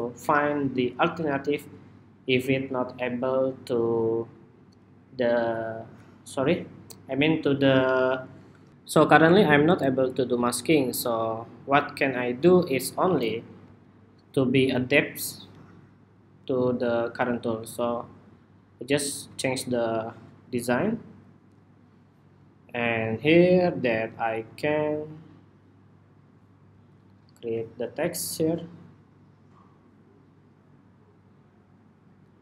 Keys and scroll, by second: 8.3 shift+super+2.